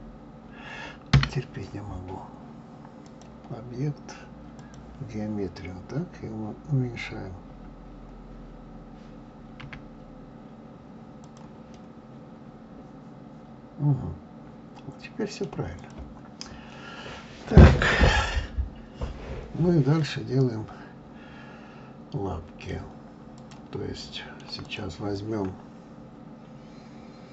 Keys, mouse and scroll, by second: 3.0-6.1 drag, 9.6 s, 11.7-14.8 middle drag, 15.8 click, 20.0-23.0 middle drag, 23.4 click, 24.0-24.6 middle drag, 24.6 click.